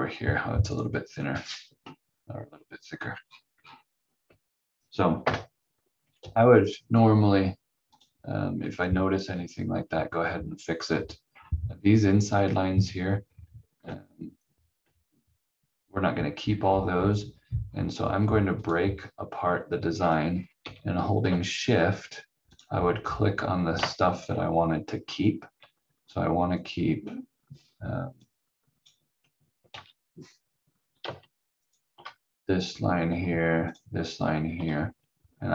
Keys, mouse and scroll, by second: 1.2 scroll down 1, 2.4-2.9 scroll up 1, 2.9 scroll down 1, 4.2 v, 5.2 Delete, 6.1 v, 6.7 scroll up 1, 7.9 click, 8.6 v, 10.1-10.8 scroll down 1, 10.8-13.2 scroll up 1, 13.2-13.8 scroll down 1, 13.8 v, 14.8 v, 16.6-18.2 scroll down 1, 18.6 click, 19.9 scroll up 1, 20.6 v, 22.4 shift+click, 24.2-27.3 scroll down 1, 28.2 click, 29.7 ctrl+z, 31.6 shift+click, 33.6 shift+click.